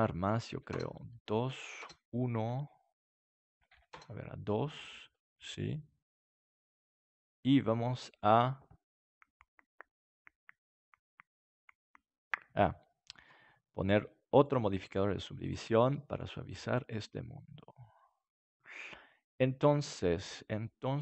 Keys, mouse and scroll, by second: 4.7-7.5 middle drag, 14.4-16.1 drag, 16.5-18.3 middle drag.